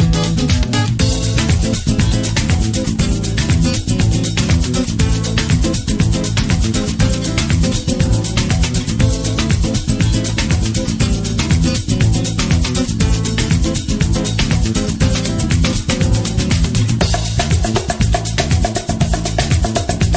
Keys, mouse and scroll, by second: 0.0 scroll up 1, 0.6-4.5 middle drag, 0.6 scroll down 1, 3.6 t, 4.6-6.6 middle drag, 5.7 scroll down 1, 8.2-12.0 middle drag, 8.2-9.0 scroll down 2, 12.0 scroll up 2, 13.2-16.5 middle drag, 17.8-20.1 drag, 19.8 KP_Enter.